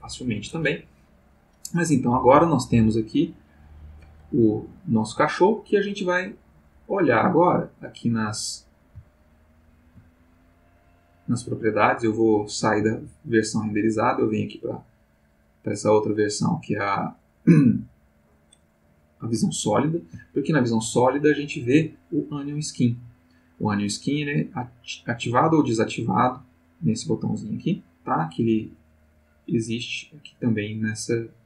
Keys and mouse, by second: 3.1 click, 3.6 click, 6.9 click, 8.0 click, 8.5 click, 9.2 ctrl+middle click, 10.8 click, 15.1 click, 20.3 ctrl+middle click, 24.2 click, 24.8 click, 25.3 click, 25.8 click, 26.3 click, 26.7 click, 27.1 click, 27.5 click, 29.2 click, 29.8 click, 30.8 click, 31.3 click.